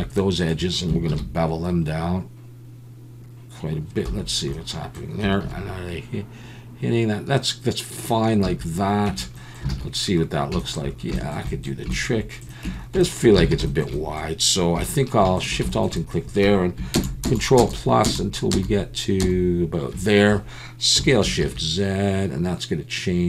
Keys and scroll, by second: 1.1 ctrl+b, 4.1 Escape, 5.4 ctrl+b, 8.4 a, 9.1 Tab, 9.7 alt+a, 12.6 Tab, 13.5 alt+a, 14.8 3, 16.9 ctrl+KP_Add, 17.2 ctrl+KP_Add, 17.6 ctrl+KP_Add, 19.9 ctrl+KP_Add, 21.0 s, 21.4 shift+z, 21.5 ctrl+KP_Add.